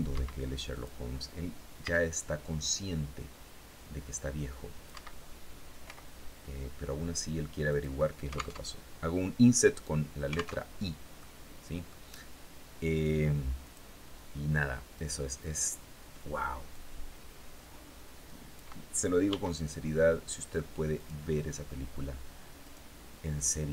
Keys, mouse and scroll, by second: 0.2 click, 1.2 c, 2.0-4.5 drag, 4.3 Escape, 5.3 i, 7.1 click, 8.0 alt+Tab, 10.1 alt+Tab, 10.6 click, 13.0 click, 14.4 right click, 16.1-18.2 drag, 18.7 s, 20.4 click, 22.0 right click.